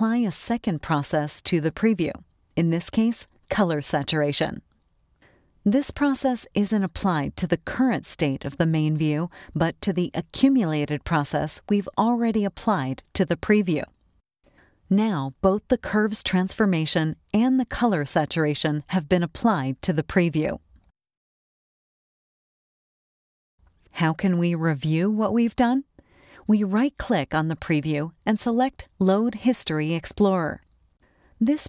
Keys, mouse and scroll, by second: 2.1 click, 7.1-10.6 drag, 15.9 click, 16.8 click, 17.7 click, 18.9 click, 26.8 right click, 31.0 click.